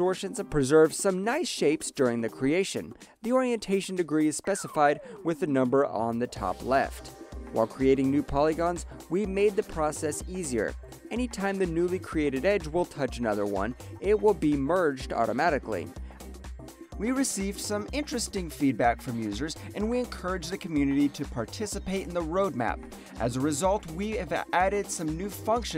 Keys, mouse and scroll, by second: 0.4 alt+middle click, 0.7 alt+right click, 0.9 alt+middle click, 1.5 ctrl+shift+click, 2.7 alt+right click, 3.0 alt+middle click, 4.0 ctrl+shift+click, 4.8 alt+middle click, 5.6 ctrl+shift+click, 6.7 alt+middle click, 7.5 ctrl+shift+click, 8.3 alt+middle click, 9.3 ctrl+shift+click, 15.2 alt+middle click, 15.4 alt+click, 16.0 alt+right click, 16.1 alt+middle click, 17.1 click, 24.2 click.